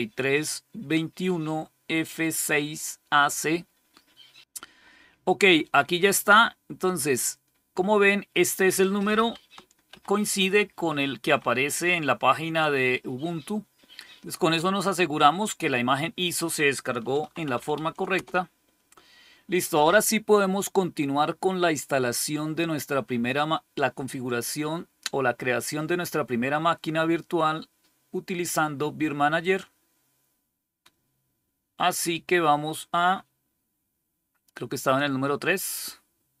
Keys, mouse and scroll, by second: 6.1-8.3 drag, 9.8 ctrl++, 10.5 ctrl++, 11.1 ctrl++, 11.8 ctrl++, 16.1 click, 16.8-18.1 typing, 29.3 click, 34.7 click.